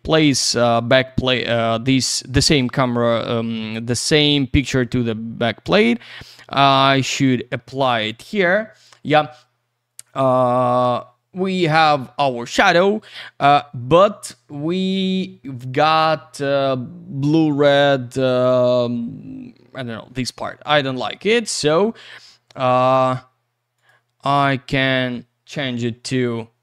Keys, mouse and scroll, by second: 1.9 click, 3.6 click, 6.3 click, 21.0 click, 23.8 click.